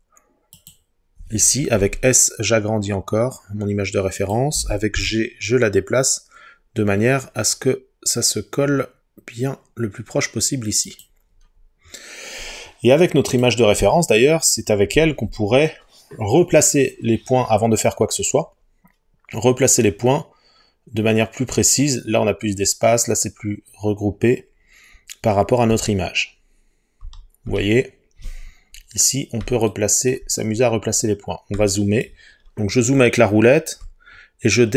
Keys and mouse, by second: 0.6 click, 1.8 s, 4.2 click, 5.0 g, 10.9 click, 13.3 click, 25.7 Tab, 27.0 Tab, 27.5 Tab.